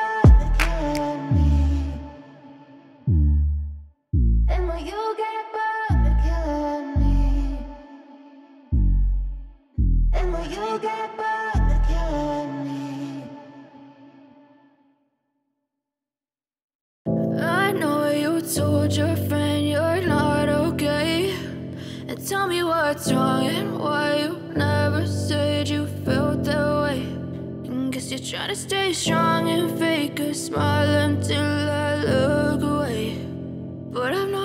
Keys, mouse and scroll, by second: 3.4 alt+shift+click, 5.4 double click, 13.1 right click, 17.5 double click, 26.8 right click, 31.5 right click.